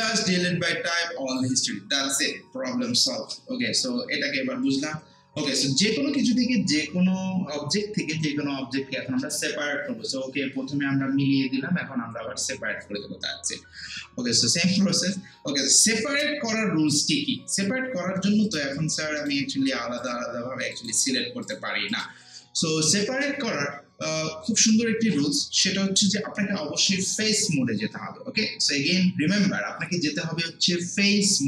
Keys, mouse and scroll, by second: 1.3 click, 18.4 click.